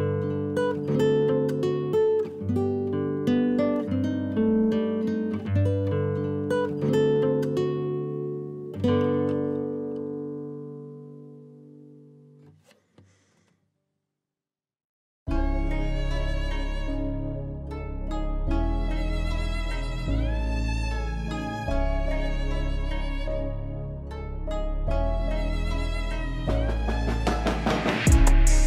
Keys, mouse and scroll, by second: 0.6 s, 1.3-2.8 middle drag, 2.8 KP_7, 3.3 KP_Divide, 3.8-4.2 middle drag, 4.2 scroll up 2, 4.5-5.2 shift+middle drag, 5.2 shift+click, 5.4 shift+click, 6.4 shift+click, 7.8 ctrl+p, 9.1 click, 9.3 click, 9.8 g, 10.7 KP_7, 11.5 r, 13.1 scroll down 1, 13.3-14.4 middle drag, 14.4 KP_1, 15.1 g, 16.0-17.5 middle drag, 18.9 KP_1, 19.0 g, 19.5 scroll up 2, 19.7-20.0 shift+middle drag, 20.0 scroll down 1, 20.2 shift+a, 21.3 s, 22.3 s, 24.2 g, 25.6 s, 26.3 middle click, 26.9 KP_7, 27.5 s.